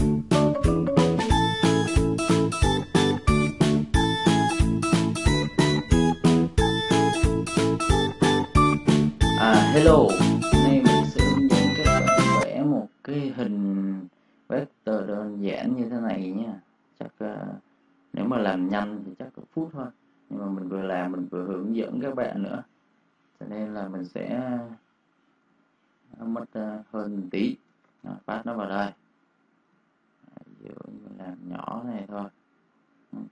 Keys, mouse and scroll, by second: 0.0-0.3 typing, 0.2 click, 2.1-3.4 typing, 2.2 click, 2.7 click, 3.0 click, 11.4 click, 14.5 right click, 18.2 click, 22.8 n, 23.4 Return, 24.9 click, 25.4 space, 25.5 click, 26.4 space, 26.7 click, 27.0 space, 27.2 click, 27.9 ctrl+v, 28.4 space, 28.5 click, 29.6 space, 29.7 click.